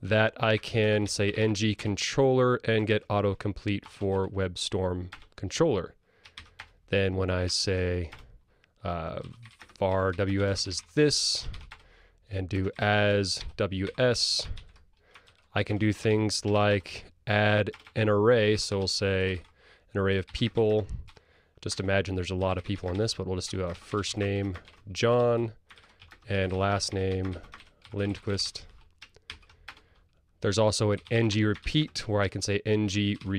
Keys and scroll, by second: 3.8 ctrl+space, 5.1 Return, 9.1 super+e, 11.6 super+e, 18.6 super+e, 29.4 super+e, 30.5 super+e, 31.3 Tab.